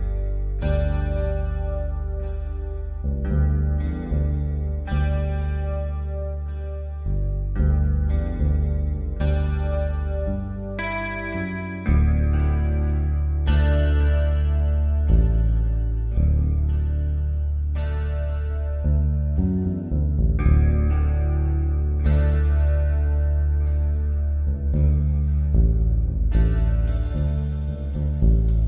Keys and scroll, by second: 0.8 b, 2.0-2.7 typing, 24.0 shift+F6, 28.2 shift+F6.